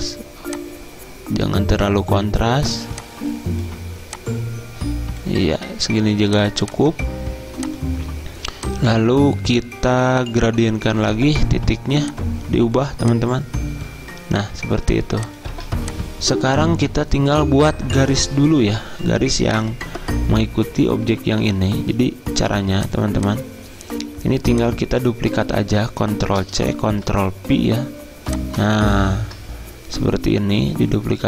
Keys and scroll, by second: 15.6 z, 26.5 ctrl+c, 27.0 ctrl+v.